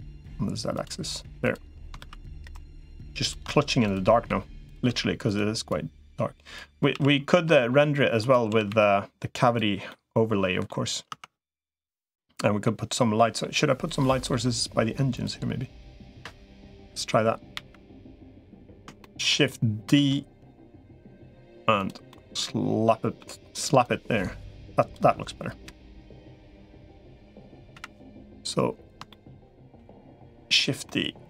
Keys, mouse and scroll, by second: 1.8 ctrl+r, 2.8 3, 3.0 click, 4.2 e, 4.8 s, 5.6 click, 6.8 s, 8.4 s, 9.7 middle click, 11.0 Tab, 12.0 middle click, 12.7 middle click, 13.8 middle click, 16.6 KP_1, 17.4 KP_7, 18.8 shift+middle click, 20.0 shift+d, 21.9-23.0 middle drag, 23.8-24.8 drag, 25.4 KP_1, 26.2 KP_3, 27.6 KP_7, 28.9 shift+middle click, 29.6 g, 30.7-31.2 middle drag.